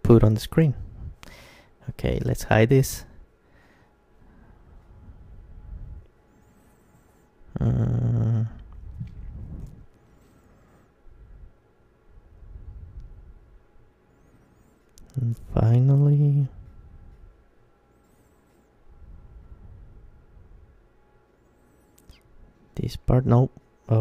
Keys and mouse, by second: 0.3 h, 0.9 right click, 1.8 h, 3.0 Tab, 3.6 Tab, 4.2 Tab, 4.9-7.2 middle drag, 7.2 KP_1, 7.9-13.5 middle drag, 17.8 KP_3, 19.7 g, 22.1-23.1 right drag, 23.1-24.0 middle drag.